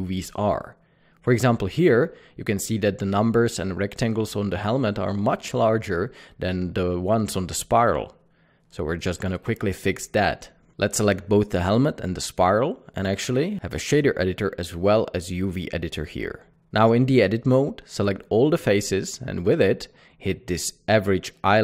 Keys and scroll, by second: 11.7 typing, 12.2 Tab, 12.5 Tab, 18.1 Tab.